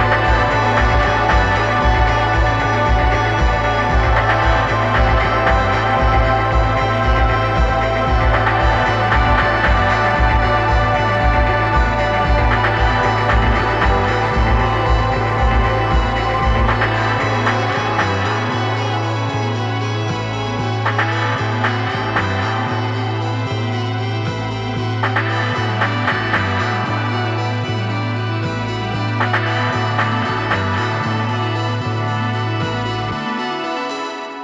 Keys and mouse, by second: 2.3-4.3 drag, 4.4-6.1 drag, 28.7-31.3 drag, 33.9-34.4 drag.